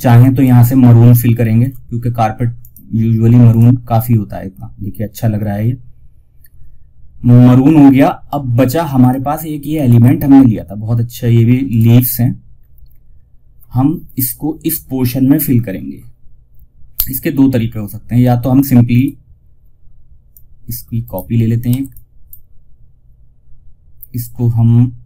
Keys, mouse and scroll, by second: 0.7 ctrl+alt+shift+s, 1.9 click, 8.3 click, 9.0 scroll up 1, 11.0 click, 11.8 scroll down 1, 18.2 click, 20.3 right click, 21.0 F2, 21.2-24.7 drag, 24.7 click.